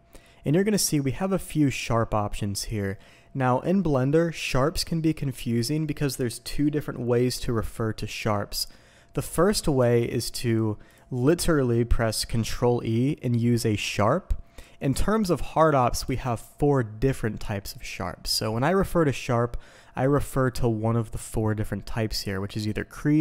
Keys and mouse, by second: 9.3-23.2 drag.